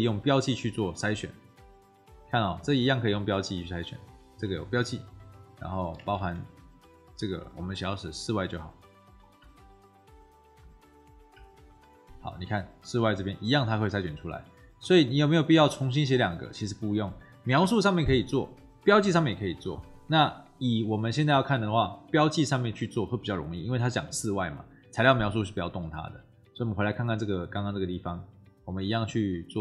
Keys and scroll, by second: 6.1 ctrl+v, 9.3 BackSpace.